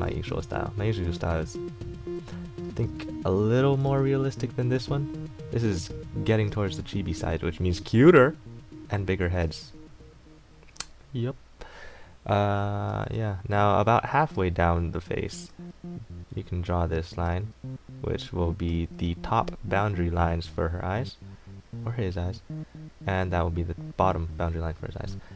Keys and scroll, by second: 0.3 ctrl+z, 6.7 ctrl+z, 13.1 ctrl+z, 15.7 ctrl+z, 17.5 ctrl+z, 18.9 ctrl+z.